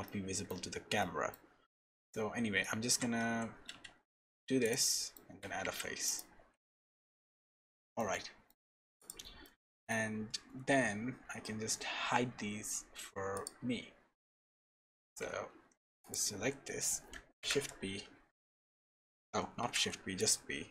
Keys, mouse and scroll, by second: 0.0 middle click, 0.6 scroll down 1, 1.0 shift+middle click, 1.5-2.6 scroll down 2, 1.8 middle click, 2.9 e, 4.9 middle click, 5.3 f, 5.6 Tab, 6.0 click, 6.7 KP_0, 7.4-7.7 scroll up 2, 7.7 shift+middle click, 8.1 middle click, 8.5-9.4 scroll down 5, 9.0 click, 9.4 middle click, 11.1 scroll down 1, 11.7-12.1 scroll down 2, 13.3 click, 15.0 Tab, 15.5 3, 16.0 click, 17.4 shift+p, 19.6 p.